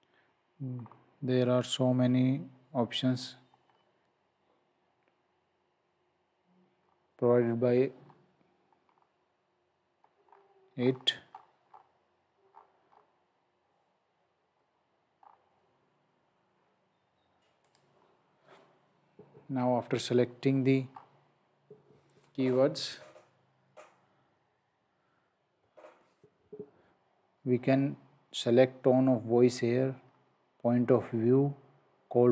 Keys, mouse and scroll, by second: 0.7 scroll down 1, 3.6-4.2 scroll down 1, 6.8-7.6 scroll down 1, 8.0 scroll up 1, 9.6-10.1 scroll down 1, 10.3-12.5 scroll up 1, 15.2-16.6 scroll up 1, 17.7 click, 20.9-21.9 scroll up 1, 30.0-30.7 scroll down 1.